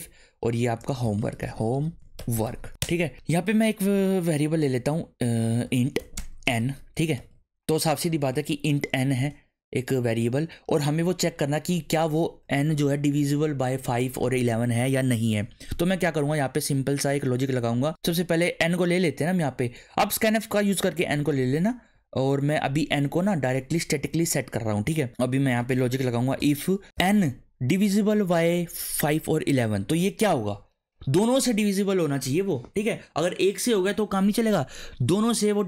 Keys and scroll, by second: 0.0 ctrl+/, 0.8-2.9 typing, 5.5-8.3 typing, 9.2 Return, 17.9 BackSpace, 21.3 n, 21.7 space, 21.9 =, 22.2 space, 23.3 7, 23.6 ;, 25.4-26.9 typing.